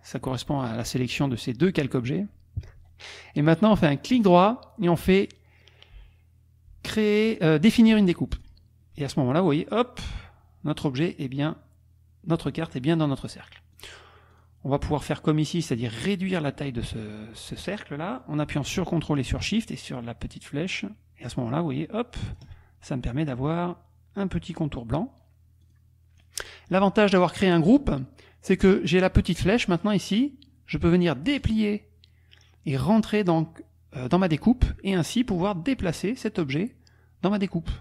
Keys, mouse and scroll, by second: 4.2-5.2 drag, 8.4 click, 13.7 click, 14.3 click, 19.5-22.5 ctrl+shift+drag, 25.6 click, 31.4 click, 33.2-34.8 drag, 35.5-37.8 drag.